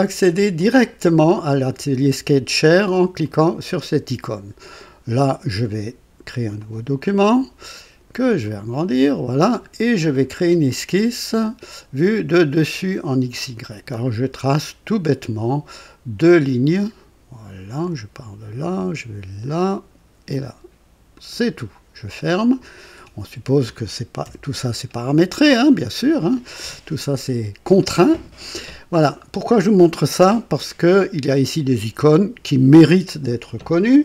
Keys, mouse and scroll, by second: 0.5 click, 3.2 click, 6.5 click, 8.4 click, 11.3 click, 13.3 click, 14.4-15.2 right drag, 16.1 click, 17.8 click, 19.5 click, 21.1 click, 22.1 click, 24.2 KP_2, 24.8-25.2 scroll down 1, 25.4-26.5 right drag, 27.7 click.